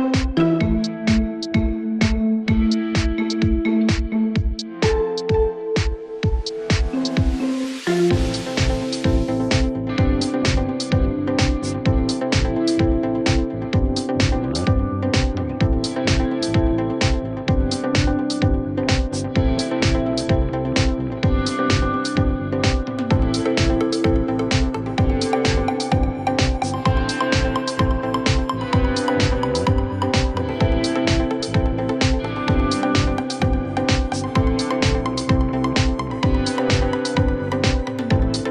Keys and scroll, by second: 0.9 c, 1.1 Escape, 4.9 Escape, 13.5 r, 13.8 Escape, 17.4 space, 18.4 r, 18.8 Escape, 23.9 space, 31.1 5, 31.3 Return, 34.9 3, 35.1 Return.